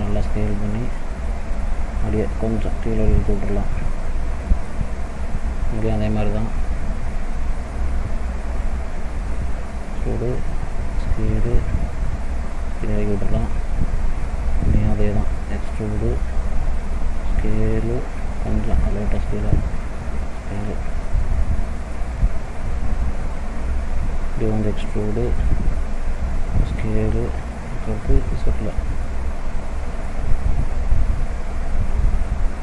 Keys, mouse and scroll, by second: 2.3 click, 4.1 middle click, 5.5 middle click, 7.0 click, 8.0 e, 9.8 s, 11.9 click, 12.9 middle click, 14.5 click, 15.3 e, 16.9 s, 18.7 click, 19.8 s, 21.5 middle click, 23.2 click, 24.5 e, 26.0 s, 28.3 click, 29.1 middle click, 30.3 scroll down 1, 31.1 scroll down 1, 31.5 ctrl+z, 32.0 ctrl+z.